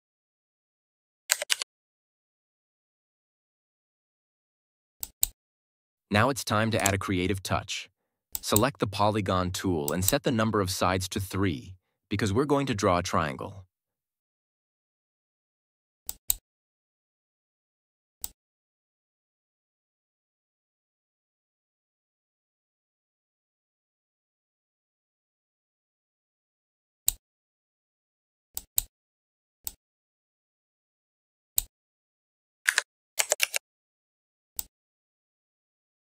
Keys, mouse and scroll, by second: 1.2 ctrl+Return, 1.4 ctrl+-, 4.9 click, 16.0-27.2 drag, 28.4-31.7 drag, 32.6 Up, 33.3 ctrl+t, 34.5-36.1 drag.